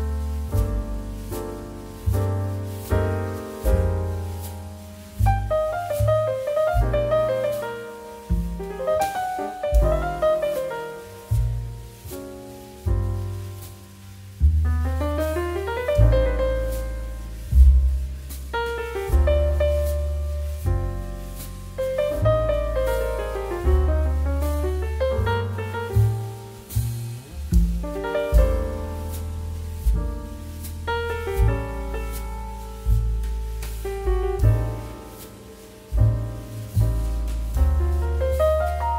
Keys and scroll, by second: 2.8 z, 4.2 z, 6.9 v, 9.1 v, 9.5 z, 10.1 x, 12.1 z, 18.5 c, 20.6 z, 22.9 v, 32.7 z, 32.8 z, 33.8 2, 36.1 ctrl+z, 37.1 c.